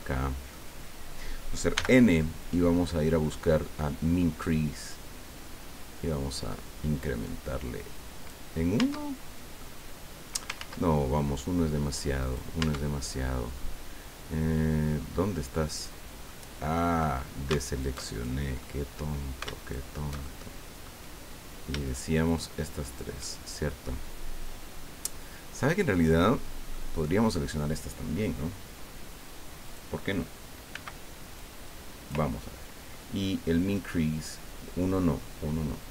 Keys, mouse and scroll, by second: 0.0 shift+middle click, 0.8 scroll down 2, 1.7 n, 4.5-8.5 drag, 8.8 Tab, 9.6 click, 10.5 ctrl+z, 12.2 right click, 12.6 Tab, 14.3 scroll up 2, 15.7 click, 16.4 middle click, 16.5-16.8 scroll up 2, 17.6 alt+shift+right click, 18.6 alt+shift+click, 19.6 alt+shift+right click, 20.2 alt+shift+click, 21.8 shift+right click, 22.3 shift+right click, 22.8 shift+right click, 23.2-26.9 shift+middle drag, 29.6 click, 30.7 b, 31.3 click, 33.7-35.9 drag.